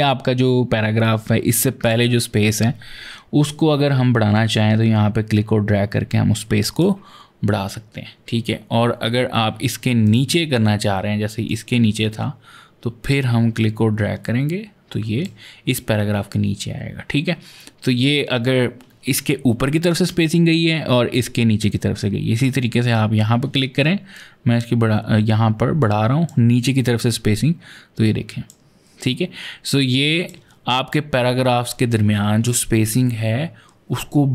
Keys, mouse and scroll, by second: 1.6 click, 4.1 click, 9.8 click, 11.3 click, 12.8 click, 19.7 click, 22.1 click, 23.9 click, 26.4 click, 28.8 click.